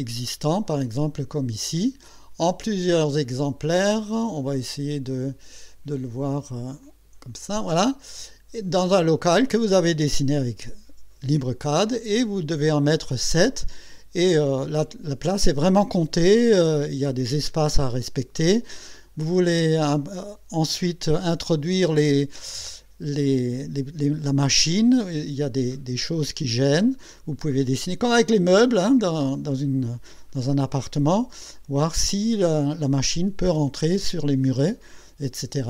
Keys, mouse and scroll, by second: 0.4 click, 1.8-2.1 scroll down 2, 3.7 click, 6.8 click.